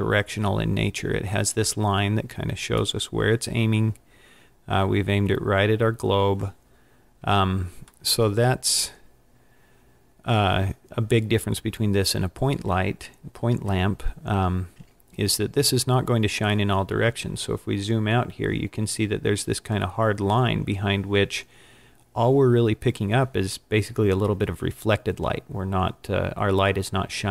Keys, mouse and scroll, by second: 1.7-2.1 scroll down 4, 3.0 middle click, 7.4-8.1 scroll up 2, 8.1 middle click, 11.1-11.5 scroll down 5, 14.5 scroll down 1, 16.8-17.8 scroll down 12.